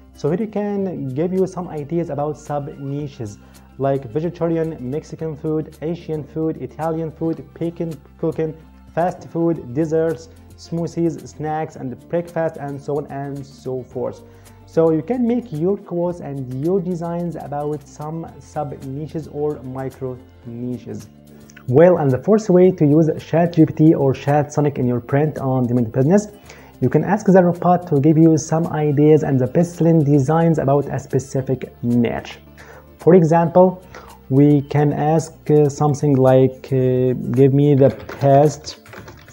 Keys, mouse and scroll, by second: 35.6 click, 37.2-39.3 typing.